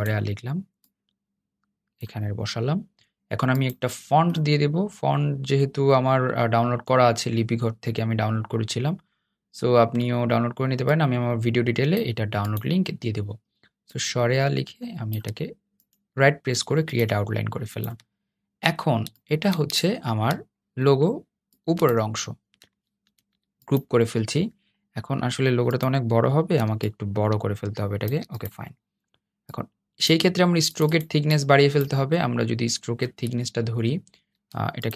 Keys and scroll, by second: 22.9 super+g.